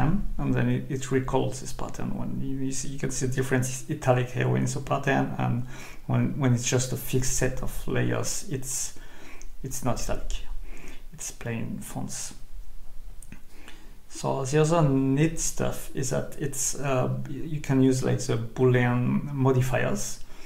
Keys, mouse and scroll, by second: 4.9 click, 14.8 Escape, 16.1 click, 16.8-17.2 scroll up 2, 17.4 scroll up 2, 19.2 click.